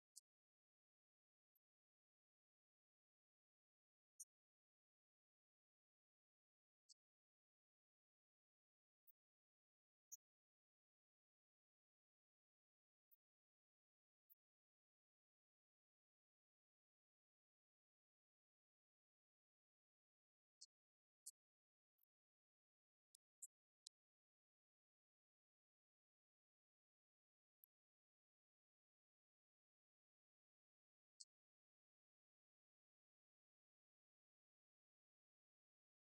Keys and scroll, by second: 1.7 Left, 11.1 Right, 22.4 Right, 23.6 Left, 26.1 Right, 26.4 Left, 27.5 Right, 33.8 alt+Down, 35.1 Right.